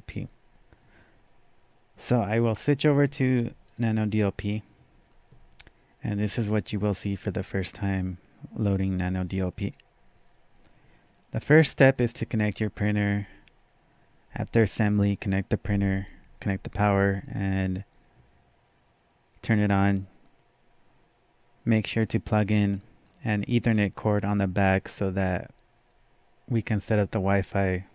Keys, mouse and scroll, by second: 3.7 click.